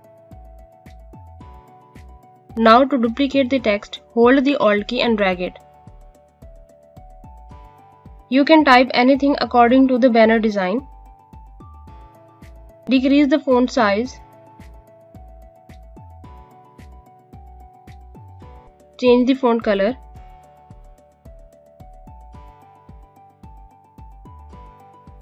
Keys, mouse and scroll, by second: 4.4 alt+Num_Lock, 4.5 click, 6.1 click, 8.0-11.4 typing, 11.7 click.